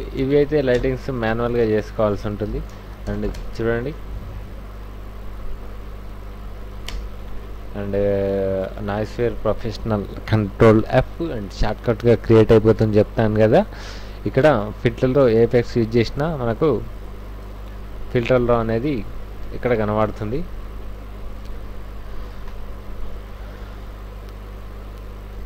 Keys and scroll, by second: 0.2 c, 0.7 Return, 1.6-3.3 typing, 6.9 Return, 8.6 ctrl+f, 17.5 super+KP_Add, 18.2 super+u, 20.4 super+KP_Subtract, 22.3 ctrl+a, 22.6 ctrl+c, 22.8 ctrl+w.